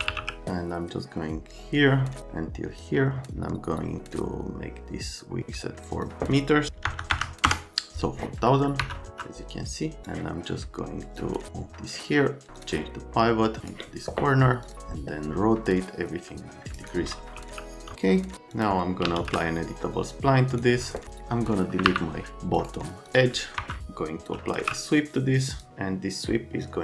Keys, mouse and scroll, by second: 0.0-0.7 typing, 1.8 Print, 5.8 Print, 5.9 Print, 6.9 KP_0, 7.1 KP_0, 7.4 KP_Enter, 8.8 F3, 17.4-19.7 typing, 18.5 click, 20.5 click, 21.9 Delete, 22.6 middle click, 23.1 click, 23.4 right click, 23.6 F3, 24.2-25.1 typing, 25.5 click.